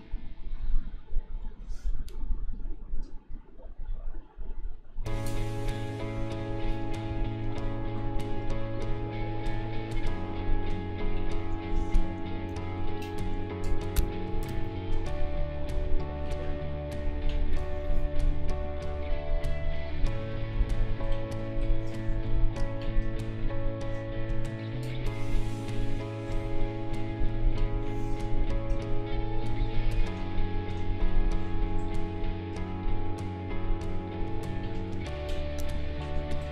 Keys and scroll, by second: 7.0 space, 15.7 space, 29.5 space.